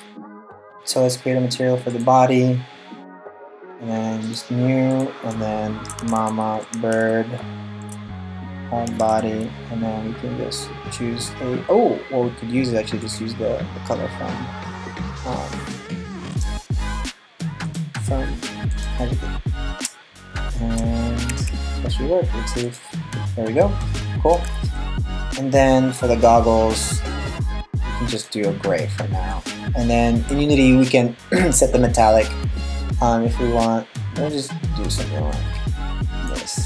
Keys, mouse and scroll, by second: 0.0 right click, 1.5 click, 3.8 click, 4.5 click, 12.6 click, 17.9 click, 20.9 Tab, 22.4 click, 23.9 Tab, 24.4 right click, 27.8 click, 36.4 middle click.